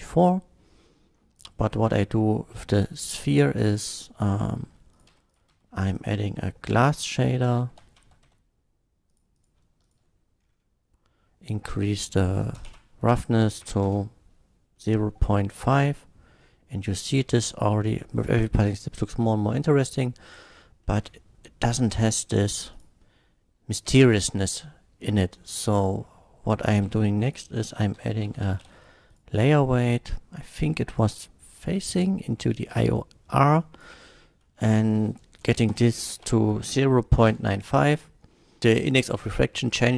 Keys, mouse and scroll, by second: 1.3 click, 2.7 click, 3.3 middle click, 4.2 click, 5.0 click, 5.1 x, 5.3 click, 5.5 shift+a, 6.0 click, 6.7 g, 7.7 l, 8.0 a, 8.3 s, 9.0 click, 9.3 click, 9.9 ctrl+shift+click, 10.4 ctrl+shift+middle click, 11.9 ctrl+shift+click, 12.6 KP_0, 12.8 KP_Decimal, 13.6 KP_5, 14.0 Return, 14.7-15.0 middle drag, 15.3 middle drag, 16.4 shift+middle drag, 17.4-17.8 shift+middle drag, 18.2 click, 18.8 click, 20.9 middle click, 21.0 scroll up 1, 22.7 click, 25.7 click, 26.6 click, 27.0-28.7 typing, 27.3 click, 29.1 click, 29.3 click, 30.6-32.7 drag, 33.5 drag, 34.6 click, 35.7 KP_0, 35.9 KP_Decimal, 36.0 KP_9, 36.3 KP_5, 37.3 Return, 38.3 middle click.